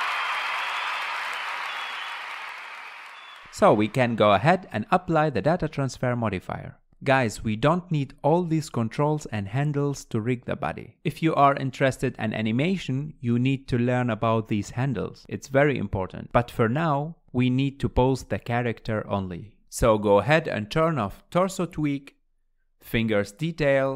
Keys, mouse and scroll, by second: 1.9 scroll down 2, 3.5 click, 3.6-4.7 middle drag, 4.7-6.2 drag, 6.2-7.2 middle drag, 7.2 click, 7.6 scroll down 2, 8.2 ctrl+Tab, 8.7 click, 9.9 r, 12.8 middle click, 13.4 r, 15.5 scroll down 1, 15.7-17.2 middle drag, 17.2 KP_1, 18.7 scroll down 2, 19.0-19.7 shift+middle drag, 20.7 click, 22.1 click.